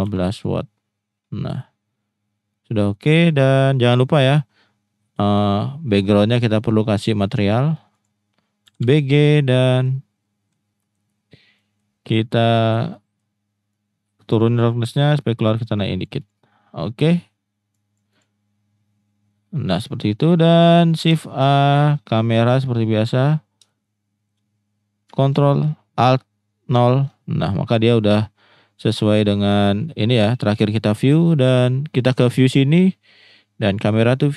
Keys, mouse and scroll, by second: 2.5 middle click, 7.4 click, 8.0-9.3 drag, 9.7 middle click, 10.8 middle click, 11.5 middle click, 12.3 middle click, 12.9-13.2 middle drag, 13.7 click, 14.7-16.0 drag, 16.2 click, 17.7 click, 18.1 click, 21.1 shift+a, 23.7-24.3 shift+middle drag, 26.7 ctrl+alt+KP_0, 33.7 click.